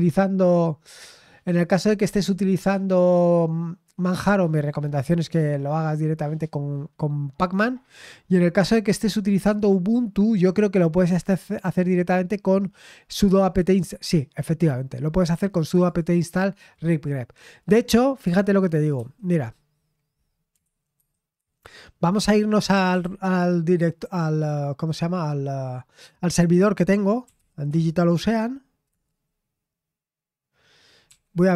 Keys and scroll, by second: 1.1-5.3 scroll down 1, 8.1-9.0 scroll up 2, 9.0-10.8 scroll up 1, 10.8-11.9 scroll up 1, 11.9-14.4 scroll up 1, 14.4-15.6 scroll up 1, 15.6-17.2 scroll up 1, 19.0 super+8, 20.6 super+7, 21.0 super+8, 21.4 super+7, 22.5-23.5 typing, 27.0-27.9 typing, 28.9 typing, 31.1 typing.